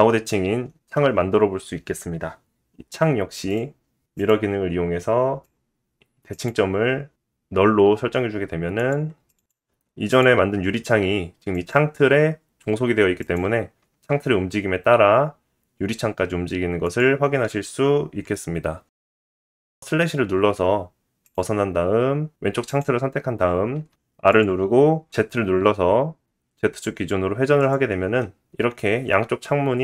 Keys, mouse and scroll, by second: 0.5 r, 3.5-8.4 drag, 8.4-14.3 middle drag, 13.2 r, 14.3 click, 14.7 click, 14.8 middle click, 15.0 r, 16.2-17.2 middle drag, 17.2 click, 17.4-18.7 middle drag, 18.7 click, 18.8 middle click, 19.9 /, 20.3-22.0 scroll down 1, 22.0 click, 22.0 scroll down 2, 23.3 click, 24.1 click, 25.8 r, 28.8 click.